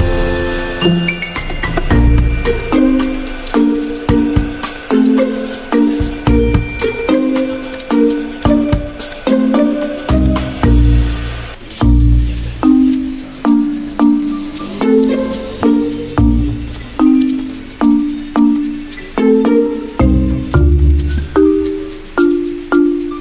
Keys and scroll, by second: 5.0 F10, 6.6 alt+Tab, 7.3 alt+Tab, 7.4 alt+Tab, 8.9 v, 13.4 o.